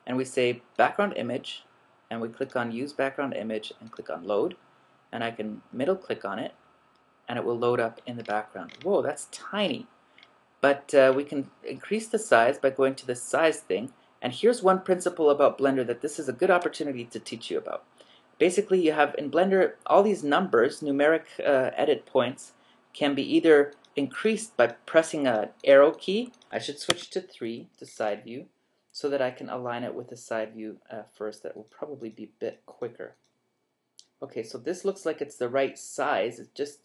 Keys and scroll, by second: 26.5 Escape, 26.9 3.